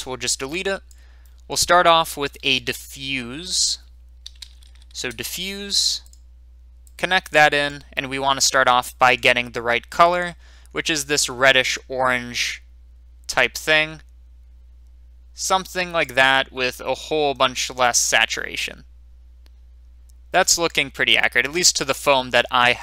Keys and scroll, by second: 2.5 x, 2.5 a, 4.2-4.6 typing, 5.0 Return, 9.0-9.8 typing.